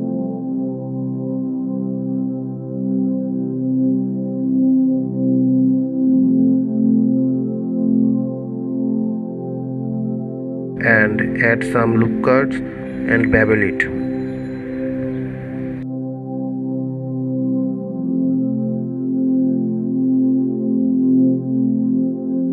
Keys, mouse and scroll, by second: 1.9 Tab, 3.8 Tab, 4.6 ctrl+a, 7.6 Tab, 8.9 ctrl+r, 21.2-22.5 middle drag.